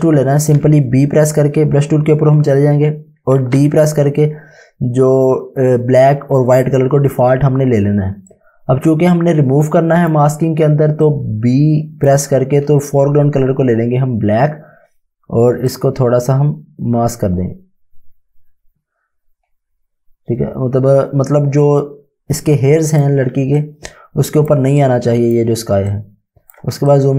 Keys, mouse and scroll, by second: 4.0 d, 7.8 d, 11.1 click, 12.7 x, 15.8 x, 15.8 click, 23.2 space, 23.6 click, 24.9 click, 27.0 right click.